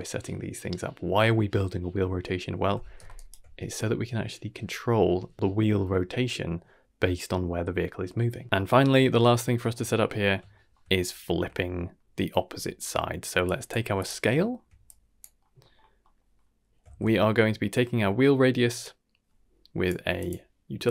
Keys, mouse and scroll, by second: 3.1-3.7 ctrl+alt+right drag, 3.7-6.1 drag, 6.6-8.1 ctrl+alt+right drag, 8.4 scroll down 2, 8.7 middle drag, 9.1 shift+middle drag, 9.5 shift+middle drag, 9.8-10.3 middle drag, 10.5 shift+middle drag, 10.9-11.3 scroll up 2, 12.3-12.7 scroll down 2, 12.5 shift+middle click, 13.0 middle click, 13.4 drag, 13.8 g, 14.3 shift+middle click, 14.8 click, 15.4 middle click, 15.7-16.0 scroll up 2, 16.0 middle click, 16.8 shift+a.